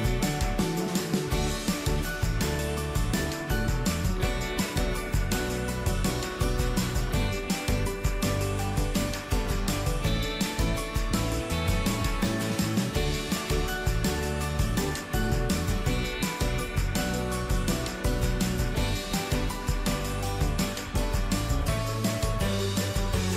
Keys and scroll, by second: 6.4 ctrl+d, 17.9 ctrl+z.